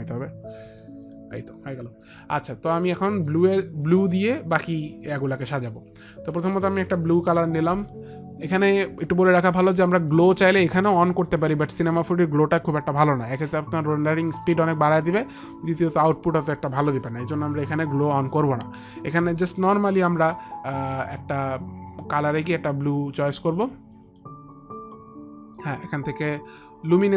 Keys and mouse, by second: 0.8 click, 1.9 alt+click, 2.4 alt+click, 3.2 alt+middle click, 5.1 alt+middle click, 6.7 click, 7.4 click, 7.7 click, 7.9 click, 22.2 click, 24.1 click, 24.9 click, 26.4 click.